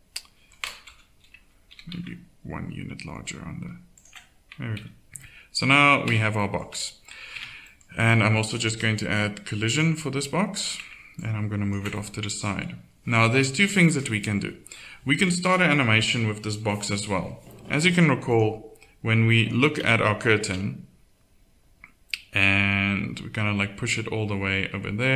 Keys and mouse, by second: 0.9 KP_1, 1.7 s, 4.8 z, 6.1 Tab, 6.7 z, 7.4 Tab, 18.3-20.4 drag, 20.4 alt+a.